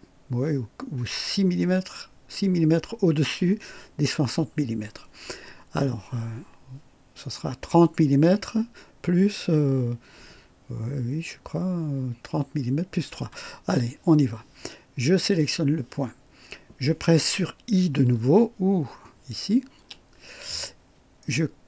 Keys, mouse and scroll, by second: 19.7 i.